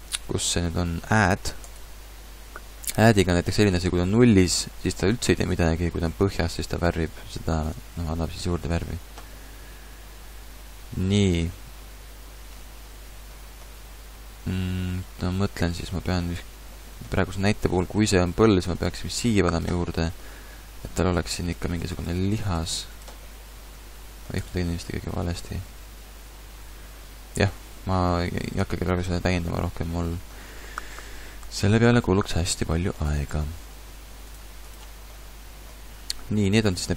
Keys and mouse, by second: 8.5 ctrl+z, 8.7 ctrl+z, 17.7 f, 19.9 click, 24.5-25.3 ctrl+z, 25.7 ctrl+z, 26.0 ctrl+z, 26.4 ctrl+z.